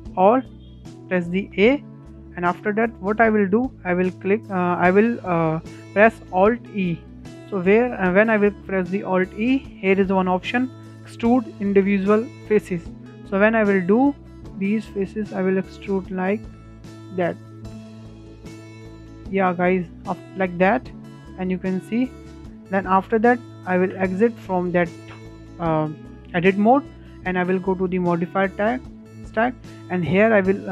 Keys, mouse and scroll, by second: 1.6 a, 2.2-5.3 shift+middle drag, 6.8 alt+e, 20.6-21.0 scroll up 4, 21.0-21.4 shift+middle drag, 21.4-21.7 scroll down 2, 21.7-23.3 middle drag, 23.3 click, 24.0 Tab, 24.5-28.1 shift+middle drag, 28.1-30.7 drag.